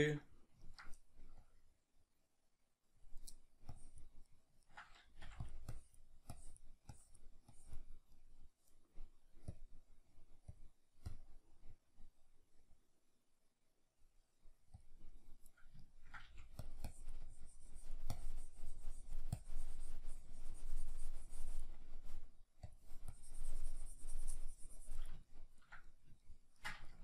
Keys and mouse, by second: 1.5-4.3 drag, 4.3-5.5 middle drag, 5.2 f, 5.5 click, 8.2-12.7 middle drag, 12.7 click, 15.8 ctrl+middle click, 16.3 f, 16.7 click, 25.3-27.0 ctrl+middle drag.